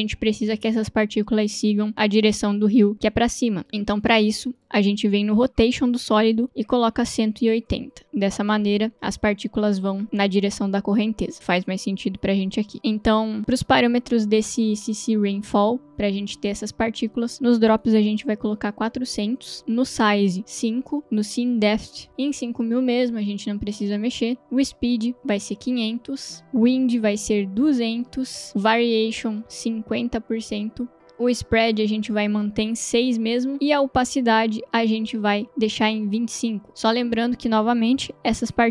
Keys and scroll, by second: 3.9 space, 5.3 r, 6.4-7.8 typing, 9.0 space, 18.6 0, 19.0 Return, 20.8 5, 20.8 Return, 25.4 0, 26.4 Return, 27.7 2, 28.0 0, 28.4 Return, 30.1 0, 30.4 Return.